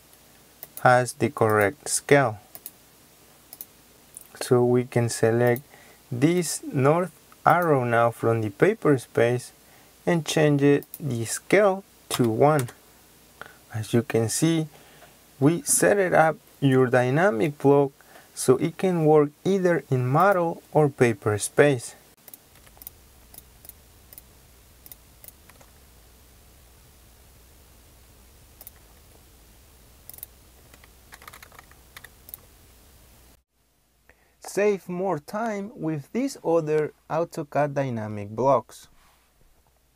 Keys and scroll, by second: 12.0 KP_1, 12.5 Return.